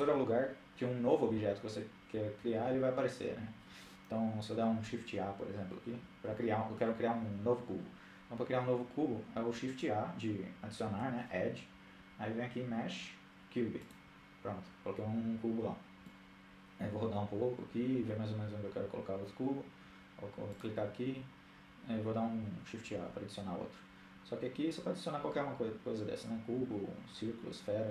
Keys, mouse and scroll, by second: 9.7 shift+a, 14.9-16.5 middle drag, 19.5-20.8 drag, 22.0 shift+a.